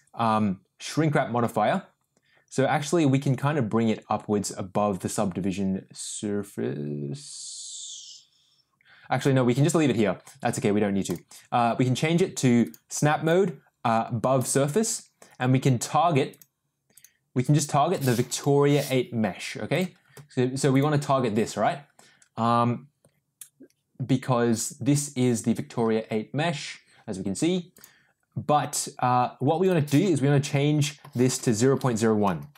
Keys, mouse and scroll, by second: 3.3-9.2 drag, 11.0-12.5 drag, 12.6 click, 13.2-14.7 drag, 16.3 click, 17.5-20.1 drag, 27.7 click, 29.6-32.5 drag.